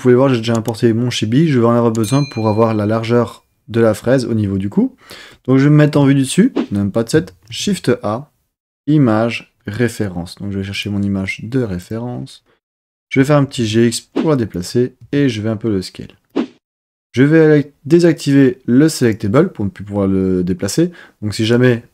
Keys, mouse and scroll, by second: 5.9 KP_7, 7.4 shift+a, 13.2 g, 13.5 x, 14.5 click, 15.0 s, 16.3 click, 19.0 click, 21.4-21.9 drag.